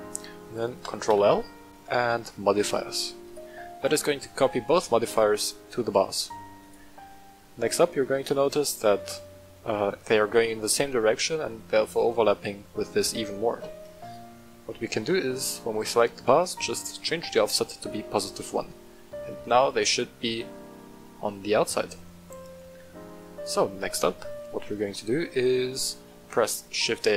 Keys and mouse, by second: 0.8 ctrl+middle click, 1.0 ctrl+l, 5.0 w, 6.6 right click, 8.0 ctrl+z, 10.1 middle click, 10.7-11.0 shift+middle drag, 14.0 click, 15.4 click, 17.2 click, 19.2 middle click, 19.9-20.5 middle drag, 20.7-21.1 middle drag, 21.4-21.9 shift+middle drag, 22.5-23.1 middle drag, 23.3 right click, 23.8 middle click, 24.9 middle click, 26.1 shift+a.